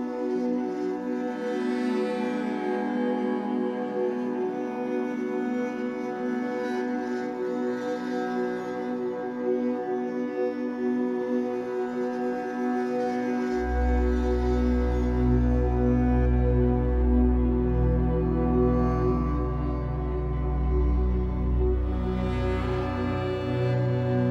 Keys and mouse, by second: 0.0 space, 3.3-4.3 alt+drag, 4.9 alt+click, 9.0-11.1 shift+drag, 14.1 alt+click, 15.1 alt+click, 16.0 KP_6, 16.3 KP_0, 16.4 KP_0, 16.6 Return, 17.7 click, 18.2 space, 22.1 space.